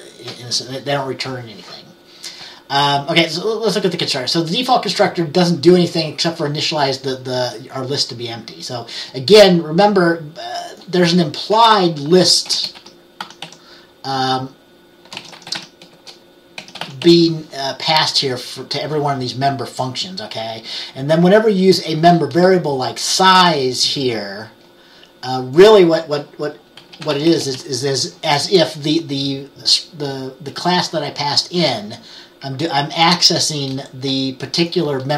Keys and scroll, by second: 12.6-17.6 typing, 26.6-28.0 typing.